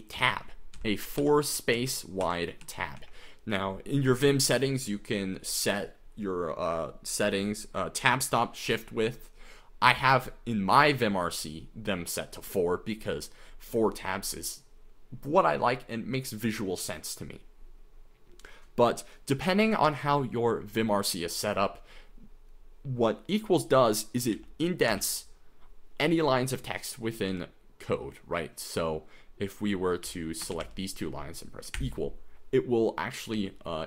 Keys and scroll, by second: 0.0-0.2 typing, 0.8 Right, 1.2 Left, 1.8 Right, 2.2 Left, 2.6 Right, 3.0 Escape, 24.3 k, 24.9 u, 27.3 k, 30.0-31.8 typing, 33.4 h.